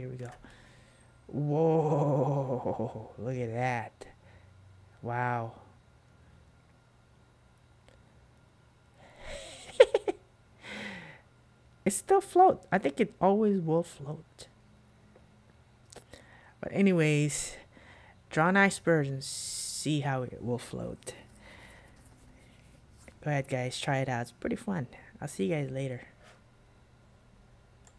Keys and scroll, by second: 0.4 super+q.